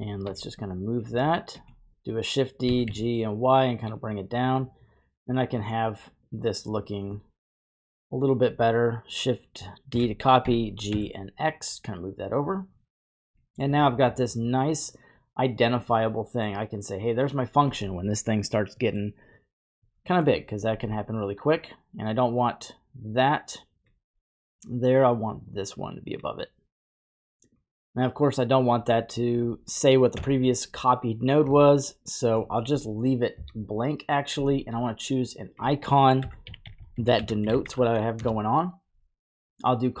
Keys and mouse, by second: 0.2 g, 1.5 typing, 2.6 g, 3.2 y, 3.8 click, 4.5-6.3 drag, 6.3 typing, 6.8 click, 7.1 drag, 7.2-8.1 drag, 9.9 shift+d, 10.4 g, 10.9 x, 12.4 click, 13.4 middle click, 16.0 middle click, 18.8 middle click, 19.9 middle click, 21.5 click, 23.0-23.9 drag, 25.1 drag, 25.2-26.2 drag, 29.2 click, 34.8-40.0 drag, 36.7 l.